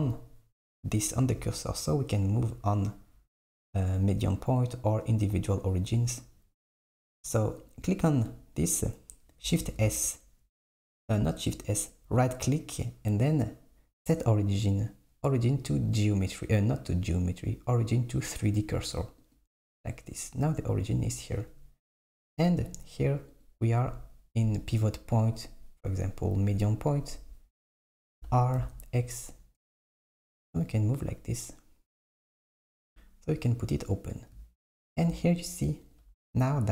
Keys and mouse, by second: 2.2-5.3 drag, 7.7 click, 9.6 shift+s, 11.8-23.4 right drag, 23.4-26.5 drag, 28.2 r, 32.8 click, 35.9 click.